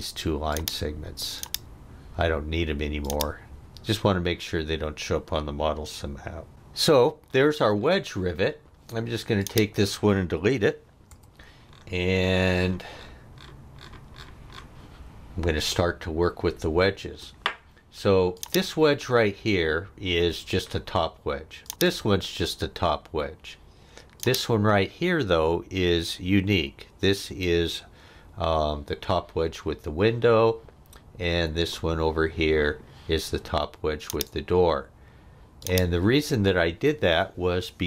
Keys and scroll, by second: 11.1 Delete.